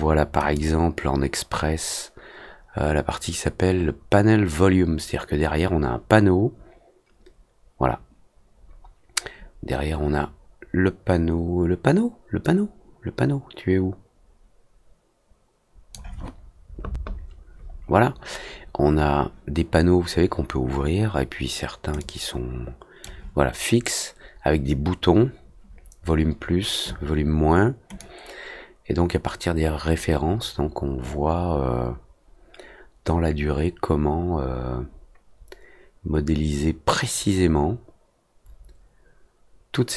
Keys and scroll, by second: 7.2 alt+Tab, 7.9 alt+Tab, 13.6 alt+Tab, 15.1 F3, 29.4 F3, 29.6 Return, 30.2 F3, 31.3 alt+Tab, 31.5 alt+b, 34.3 F3, 35.1 F3, 35.8 F3, 36.3 ctrl+Return, 37.1 F3, 38.7 F3, 39.0 ctrl+Return.